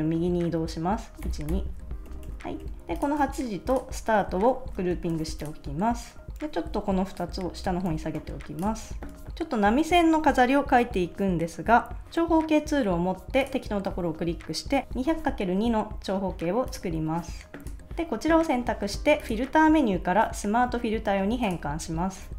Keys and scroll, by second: 1.2 shift+Right, 2.1 super+-, 2.8 super+s, 4.6 super+g, 5.2 super+s, 7.3 shift+Down, 7.9 super+s, 8.8 super+s, 14.8 2.